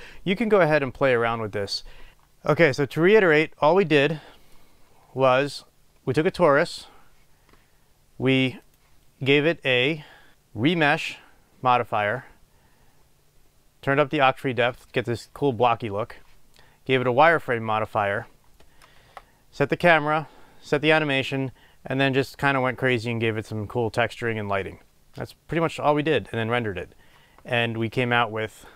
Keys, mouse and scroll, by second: 2.1-8.9 middle drag, 2.1 KP_0, 4.9-6.0 scroll down 2, 6.0-8.9 scroll up 2, 8.9 click, 19.4 KP_0.